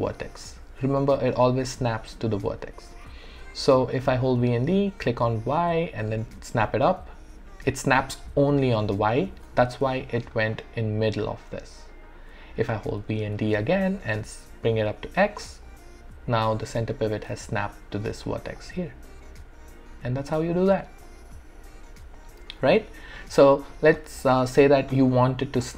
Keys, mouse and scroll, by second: 1.1-9.9 typing, 5.8 click, 10.0 alt+click, 10.9-13.0 alt+right drag, 13.0-16.7 typing, 18.0 d, 18.3 alt+right click, 18.6-20.8 alt+drag, 21.1-24.2 alt+drag, 24.2 alt+click, 25.1 alt+right click, 25.4 alt+click.